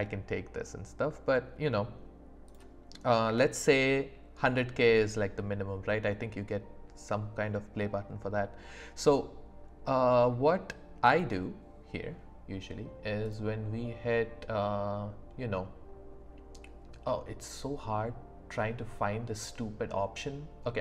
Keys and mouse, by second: 3.3 q, 13.3-20.8 drag.